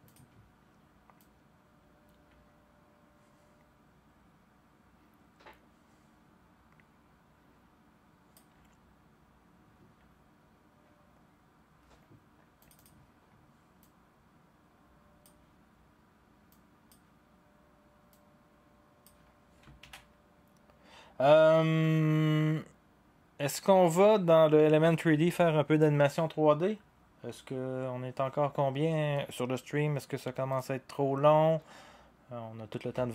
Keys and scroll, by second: 19.8 ctrl+s.